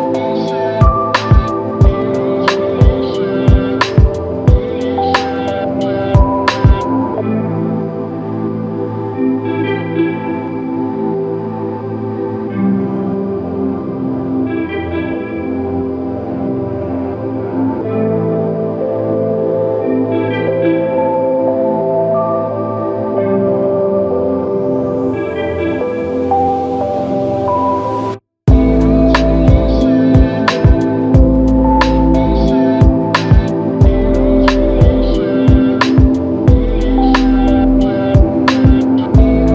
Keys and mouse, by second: 5.8 ctrl+alt+click, 17.1 double click, 28.6 typing, 29.7 right click, 30.4-30.9 typing, 32.4 typing, 36.3 double click.